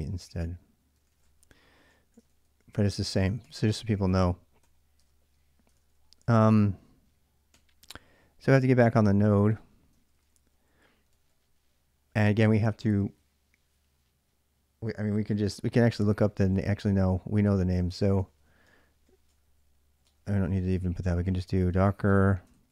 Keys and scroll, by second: 0.0-4.9 typing, 3.8 ctrl+j, 5.5 ctrl+[, 5.7 ctrl+j, 6.1 k, 6.3 k, 7.3 i, 9.7 ctrl+[, 10.1-10.9 typing, 15.8-22.7 typing.